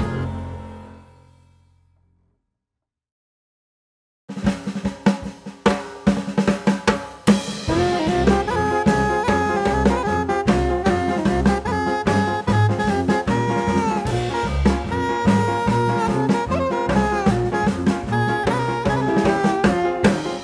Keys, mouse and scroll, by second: 0.6 click, 1.4 click, 2.1 click, 4.4 click, 7.9 click, 8.7 b, 10.4 click, 11.7 click, 12.4 click, 12.9 click, 14.1 click, 15.4 click, 15.9 click, 18.1 click.